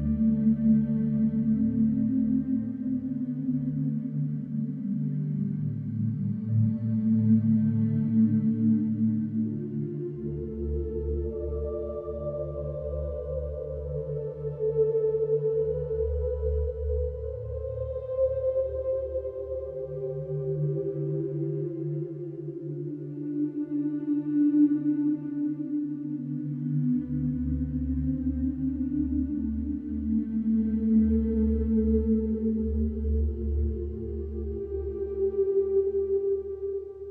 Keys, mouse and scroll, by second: 1.1 click, 2.5 g, 5.3 g, 9.7 click, 18.2 Delete, 20.1 click, 22.1-24.1 drag, 25.9 click, 28.2-31.1 drag, 34.4-37.1 drag.